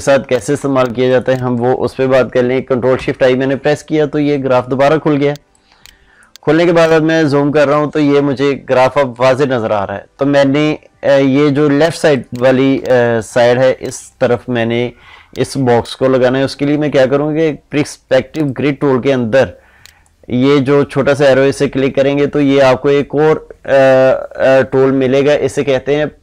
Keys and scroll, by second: 2.8 ctrl+shift+i, 5.0 ctrl+space, 12.6 ctrl+space.